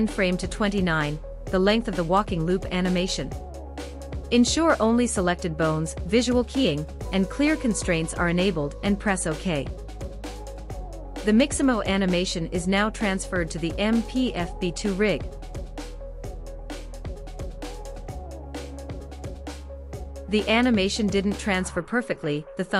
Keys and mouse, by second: 13.8 space, 15.0 space, 15.7 drag, 16.0-17.1 drag, 18.2-18.7 shift+middle drag, 19.9 click, 20.7 KP_Decimal, 22.6 middle click.